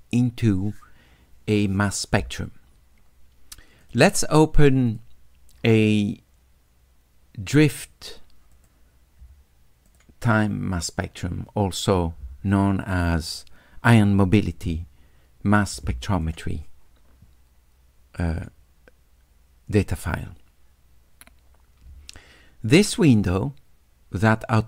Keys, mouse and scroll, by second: 3.8 click, 4.9 click, 8.6 click, 9.9 click, 16.2 click, 18.3 click, 23.3-24.6 drag.